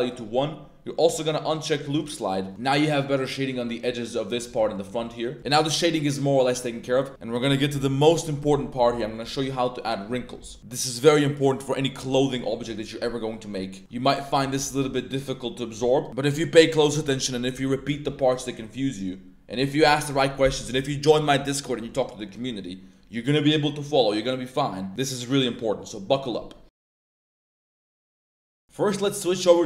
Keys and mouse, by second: 1.9 click, 2.5 Tab, 3.1-3.4 middle drag, 3.6 middle drag, 4.5 a, 4.7 middle drag, 5.1 click, 5.1 a, 5.5 middle click, 6.2 click, 6.4-6.8 middle drag, 7.0 middle click, 10.5-10.8 middle drag, 11.2 middle click, 21.7 middle click, 22.2 middle click, 22.9 middle click, 24.7 middle click.